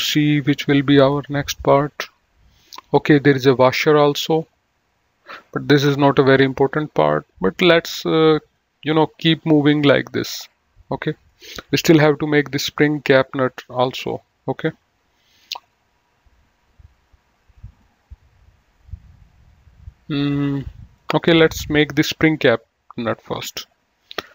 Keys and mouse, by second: 1.4 click, 8.8 click, 11.0 click, 18.0 click, 23.3 click.